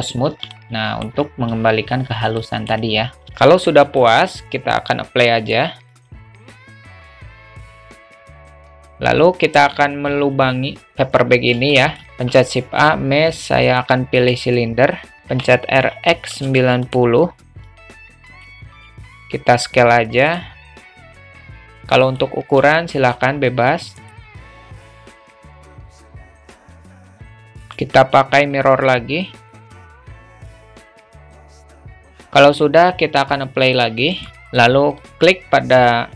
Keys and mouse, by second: 0.6-1.2 alt+middle drag, 2.4 alt+middle drag, 3.5-4.1 alt+middle drag, 5.6 click, 6.6-7.1 drag, 7.4-7.7 alt+middle drag, 11.7 alt+shift+middle click, 12.0 shift+a, 15.3 r, 17.7 click, 18.7 s, 21.0 s, 22.6 g, 24.2 alt+middle click, 24.7 click, 25.1 middle drag, 25.4 s, 25.7 `, 26.1 alt+shift+middle drag, 26.6 s, 27.1 alt+middle click, 27.6-29.6 drag, 31.0 alt+middle click, 31.6 `, 33.7-34.3 drag, 34.5 alt+middle click, 35.0 click.